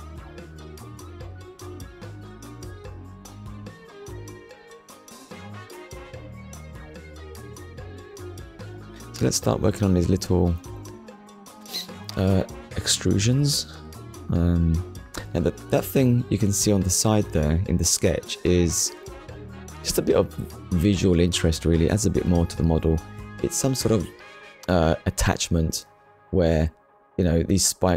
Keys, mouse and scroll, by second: 0.8 scroll up 1, 1.9 shift+middle click, 6.1 shift+a, 9.9 click, 16.8 click, 18.2 8, 19.6 Return, 20.8 scroll down 1, 21.5-21.9 scroll down 2, 22.0 shift+middle click, 24.5 middle click, 26.7 middle click, 27.5 KP_1.